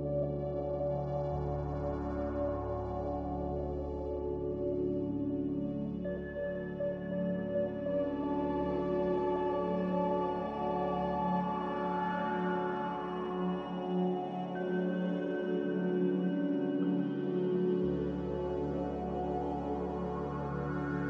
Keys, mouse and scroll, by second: 16.6 typing, 16.8 Return, 19.3 typing, 19.5 Return.